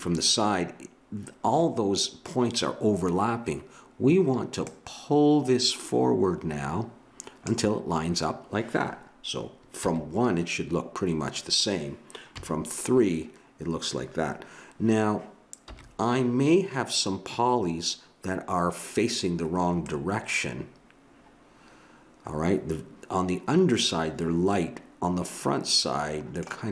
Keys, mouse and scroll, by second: 4.4 scroll up 1, 4.6-5.9 drag, 9.8 KP_1, 12.4 KP_3, 15.7 KP_1, 19.9-21.7 middle drag.